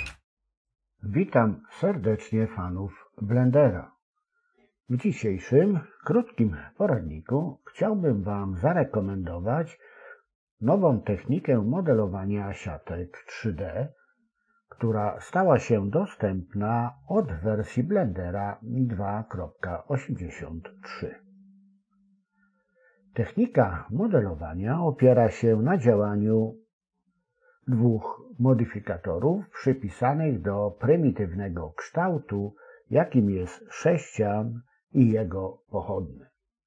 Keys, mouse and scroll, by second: 4.8 click, 5.5-7.1 drag, 9.1-10.5 drag, 16.3-17.8 drag, 19.5 Tab, 23.6-25.1 drag, 26.2 s, 28.5 g, 30.8 s.